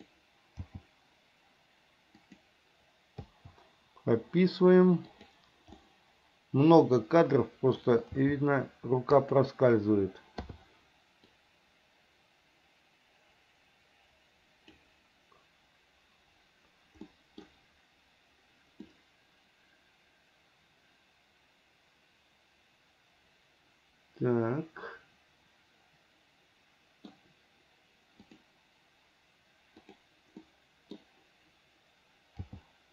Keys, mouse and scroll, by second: 0.8 g, 3.5 i, 5.4 click, 6.0-8.0 middle drag, 8.4 g, 10.7 i, 11.6-15.0 drag, 17.3 middle click, 19.1-27.3 middle drag, 28.4 click, 30.1 click, 30.6 middle click, 32.6 g.